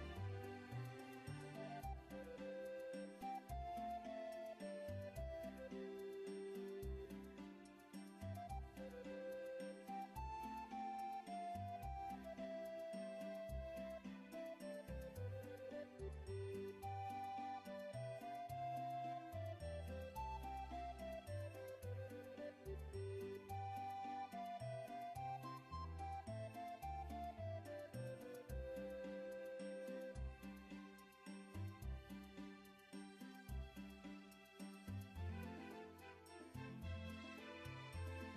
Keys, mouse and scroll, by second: 2.7 ctrl+alt+z, 4.1 ctrl+alt+z, 6.1 click, 8.1 ctrl+click, 9.4-11.3 ctrl+scroll up 1, 14.4 click, 15.5 click, 17.9 alt+click, 19.1 click, 20.5 ctrl+click, 23.5 click, 24.4 click, 26.2 click, 29.5 click, 35.4 click, 36.3 ctrl+click.